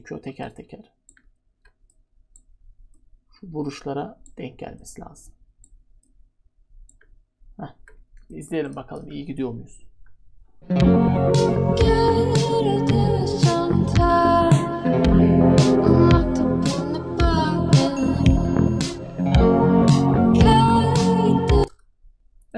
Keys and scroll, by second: 21.5 u.